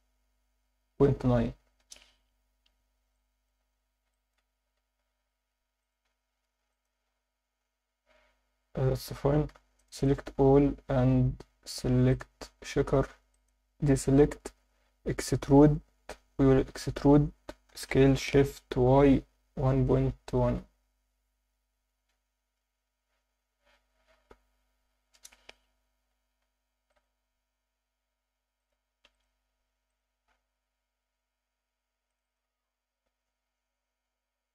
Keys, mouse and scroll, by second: 1.8 Return, 2.6 z, 3.1 alt+middle click, 3.8 scroll up 1, 4.1 alt+shift+middle click, 5.0 ctrl+r, 6.7 click, 9.8 click, 12.1-13.5 drag, 20.2 ., 20.4 1, 24.3 8, 25.1 Return, 25.4 Tab, 25.8 Tab, 26.7 ctrl+r, 28.6 click, 29.1 ctrl+r, 29.9 click, 31.6 1, 32.1 click.